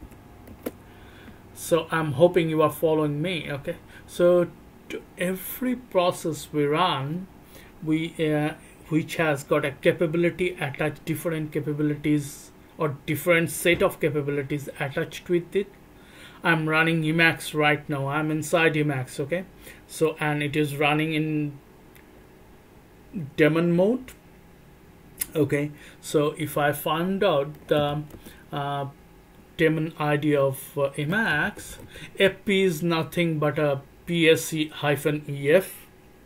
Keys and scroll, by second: 0.0 c, 0.5 Return, 27.7 f, 27.9 f, 31.4 f, 31.7 f, 31.8 f.